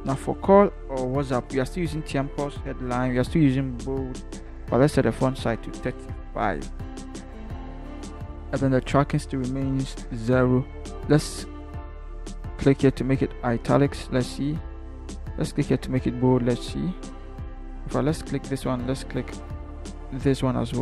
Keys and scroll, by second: 6.4 3, 6.9 5, 7.5 Return.